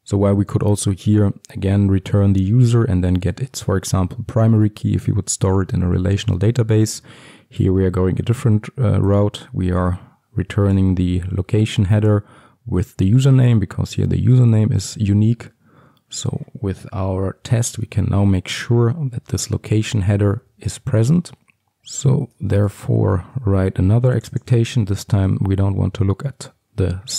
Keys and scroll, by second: 17.5 ctrl+alt+Left, 19.2 ctrl+alt+Left, 19.8 ctrl+shift+t, 23.4 ctrl+d, 25.2 ctrl+d, 26.4 Return.